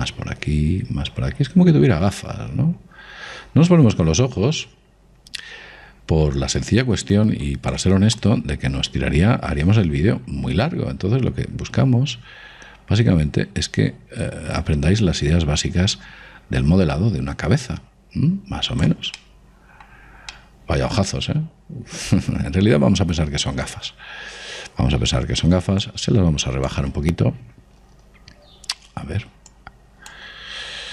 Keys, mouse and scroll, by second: 9.2 click, 20.2-23.2 middle drag, 26.9 click, 29.4-30.9 middle drag, 30.6 click.